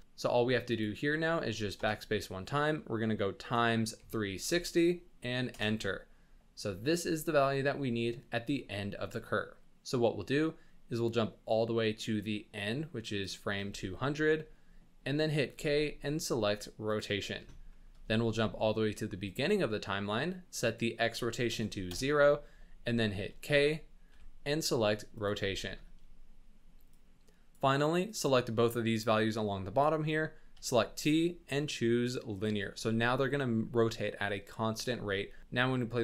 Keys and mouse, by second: 0.0-5.6 drag, 12.5 click, 13.8-14.2 shift+middle drag, 15.5 k, 17.7 shift+drag, 19.2 click, 20.7 click, 24.1 k, 25.6 shift+middle drag, 27.0 click, 28.1-29.9 drag, 30.5 t, 35.4 space.